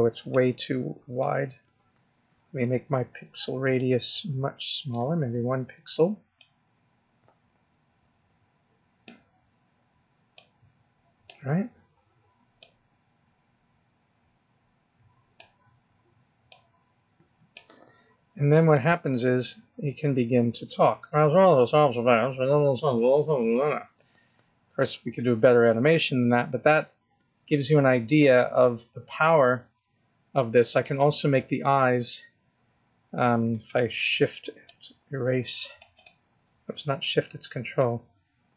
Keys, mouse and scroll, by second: 1.1 ctrl+z, 1.5 ctrl+z, 3.6 click, 6.2 click, 10.2 click, 12.5 click, 16.3 click, 18.5 click, 34.5 shift+click, 35.8 shift+click, 37.6 ctrl+click.